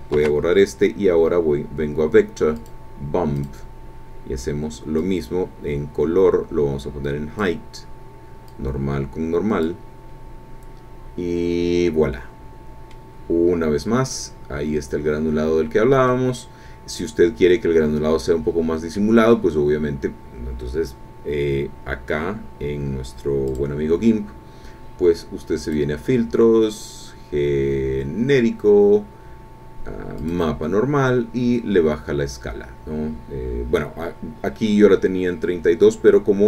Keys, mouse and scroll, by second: 0.1 shift+a, 2.5 click, 3.4 click, 5.0-7.6 drag, 8.4-9.8 drag, 12.1 middle click, 13.3-14.2 scroll up 2, 14.9-15.4 scroll down 2, 15.8 scroll down 2, 16.1-19.2 drag, 19.3-19.6 scroll up 1, 23.5 click, 25.6 click, 30.2 click, 34.2 scroll up 2, 35.2 scroll up 2, 35.7-36.1 scroll down 2.